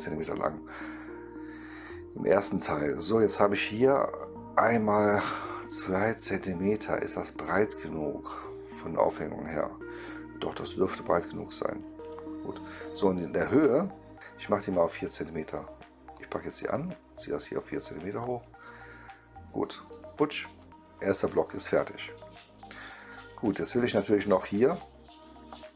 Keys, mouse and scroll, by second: 12.0-14.2 right drag, 16.1-18.1 drag, 19.8 click, 20.5-23.9 right drag.